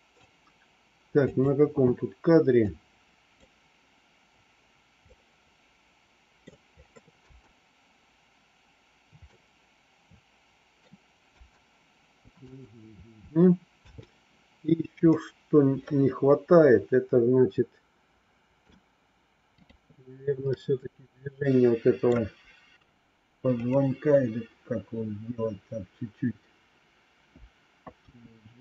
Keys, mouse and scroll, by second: 1.2 click, 2.7 click, 5.0-6.4 middle drag, 7.2 space, 9.3-10.8 middle drag, 11.3 space, 12.4 space, 13.8 space, 15.0-18.5 middle drag, 19.5 click, 20.6-22.0 middle drag, 23.5 click, 28.0 g.